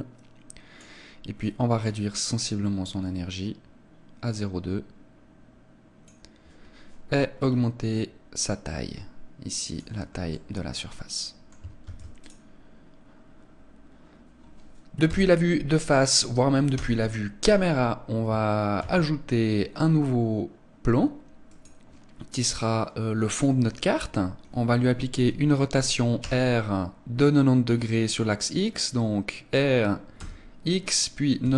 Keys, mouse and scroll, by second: 1.5 click, 7.4 scroll down 1, 8.5 click, 8.5 scroll down 3, 10.3 middle click, 11.9 ctrl+s, 15.1 KP_1, 16.8 KP_0, 18.8 shift+a, 26.2 r.